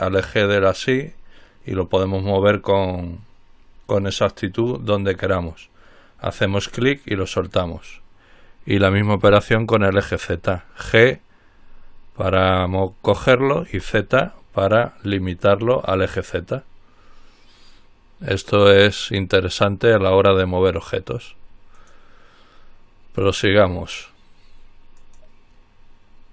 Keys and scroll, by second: 9.5 g, 13.9 z.